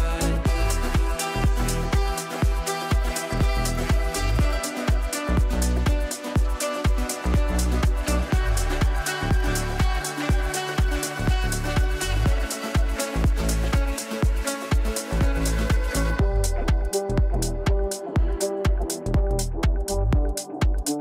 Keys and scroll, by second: 19.6 g.